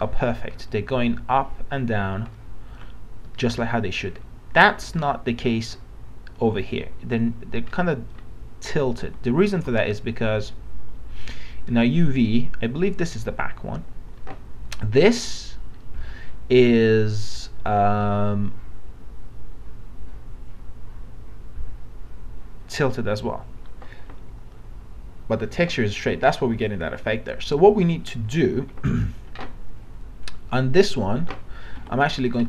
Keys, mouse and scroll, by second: 3.6 alt+middle click, 7.8 alt+middle click, 9.6 alt+Tab, 11.2 click, 31.8 e, 32.2 right click.